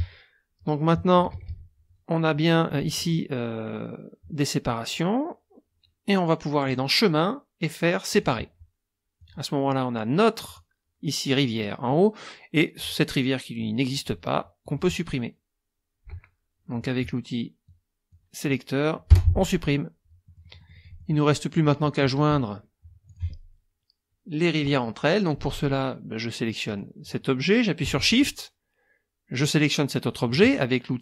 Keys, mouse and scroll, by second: 1.2 KP_Subtract, 2.7 click, 6.6 click, 8.1 click, 9.2 click, 10.4 click, 12.8 click, 14.6 click, 17.6 click, 19.1 Delete, 20.2 click, 21.2-22.0 drag, 23.1 click, 26.6 click, 29.4 shift+click.